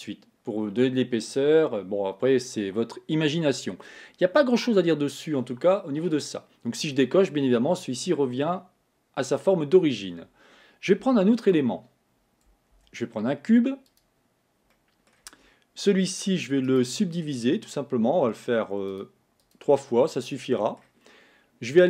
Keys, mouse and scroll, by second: 7.1 click, 8.2-11.1 middle drag, 11.1 x, 12.8 shift+a, 14.8 middle click, 15.3 Tab, 16.7-19.0 right drag, 19.0 click, 20.3-21.8 middle drag.